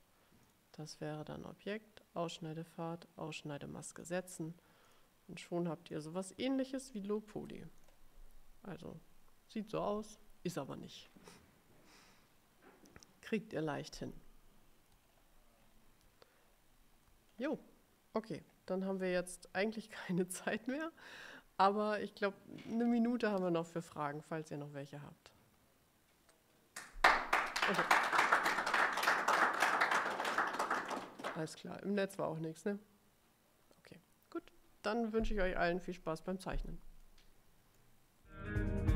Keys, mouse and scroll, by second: 0.6 click, 4.1 click, 5.0 click, 5.6 click, 6.7-7.5 ctrl+scroll up 4, 7.9 click, 13.1 click, 15.2-16.0 ctrl+scroll down 4, 16.6-16.9 scroll down 2, 17.5-17.9 ctrl+scroll up 2, 18.6 ctrl+scroll up 2, 37.1 click, 37.6 middle click, 38.0 click.